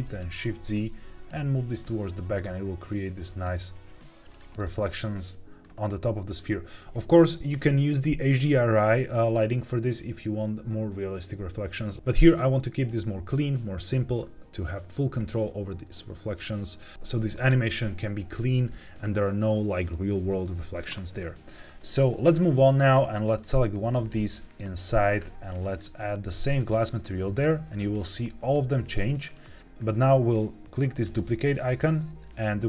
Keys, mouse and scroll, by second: 0.3 shift+z, 4.2 click, 5.6 scroll up 2, 6.3 scroll down 1, 22.7 click, 23.2 click, 23.7 click, 25.6-26.8 drag, 29.2 scroll up 2, 30.9 click.